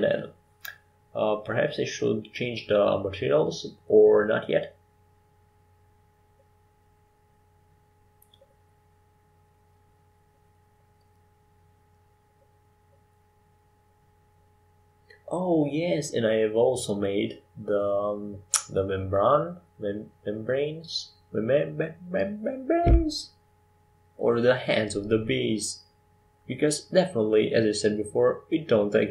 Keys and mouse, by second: 3.2-7.1 middle drag, 7.1-8.8 drag, 8.3-12.6 middle drag, 14.9 Tab, 18.3-19.6 right drag, 19.6-22.2 middle drag, 22.2 shift+d, 25.6 g, 28.4-29.1 middle drag.